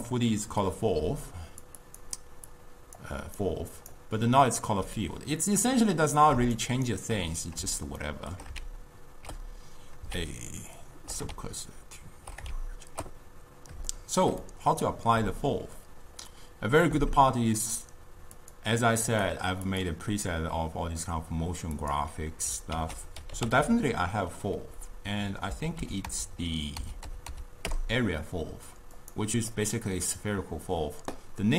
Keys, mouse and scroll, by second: 1.1-4.8 typing, 1.4 click, 1.9 click, 2.6 click, 3.5 right click, 6.7 shift+right click, 8.1-8.7 shift+middle drag, 8.7 shift+s, 10.2 shift+s, 11.4 shift+s, 13.1 shift+s, 14.0-16.0 shift+middle drag, 18.4 click, 19.2 click, 19.7 click, 21.9 click, 22.8 ctrl+a, 23.6 l, 27.3 Up, 29.6-31.5 middle drag.